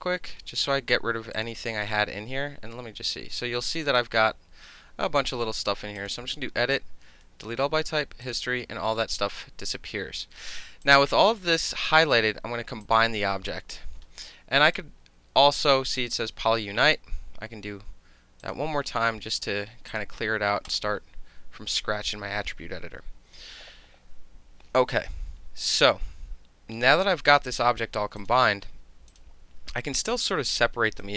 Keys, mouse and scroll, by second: 1.3 click, 2.5 ctrl+z, 3.8 click, 6.0 click, 8.2 click, 10.8-11.4 drag, 12.8 click, 14.7 right click, 18.4 click, 19.9 click, 20.7 click, 28.2 click, 29.1 click, 31.0-31.1 right drag.